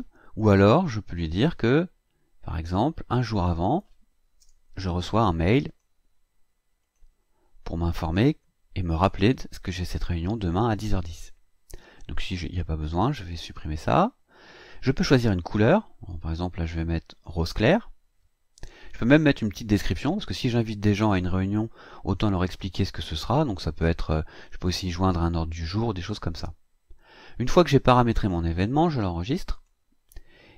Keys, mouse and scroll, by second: 0.4 click, 1.4 click, 3.5 click, 4.4 BackSpace, 5.7 click, 6.8 click, 13.6 click, 15.1 click, 17.1 click, 29.5 click.